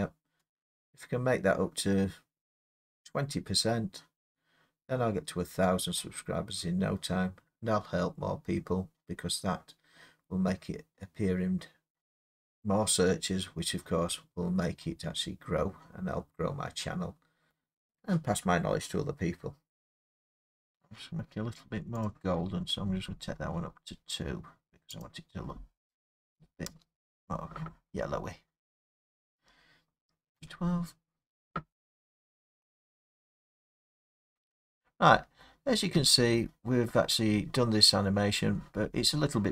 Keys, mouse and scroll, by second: 19.7 middle click, 20.3 click, 22.0 click, 22.5 middle click, 22.5 middle click, 22.6 middle click, 23.1 middle click, 23.8 middle click, 23.9 scroll, 25.4 click, 26.4 2, 26.7 Return, 28.0 scroll, 29.0 scroll, 30.4 F12, 35.2 scroll, 35.4 scroll down 4, 36.0 Escape, 37.4 scroll, 37.6 middle click, 38.2 middle click, 38.2 middle click.